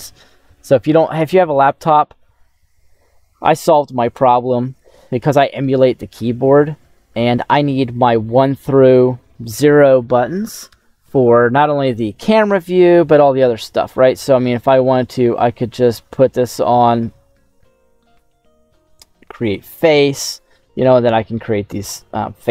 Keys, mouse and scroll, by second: 20.3-21.4 middle drag, 22.4-22.5 drag.